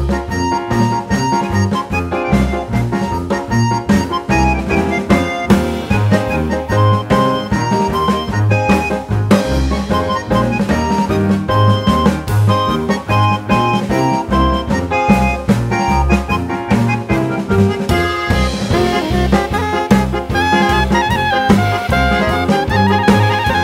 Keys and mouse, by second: 1.0-2.8 drag, 3.6-4.6 drag, 5.1-6.5 drag, 7.0-8.5 drag, 10.2-11.9 drag, 14.4 click, 15.6-16.7 drag, 17.9 g, 20.8 click.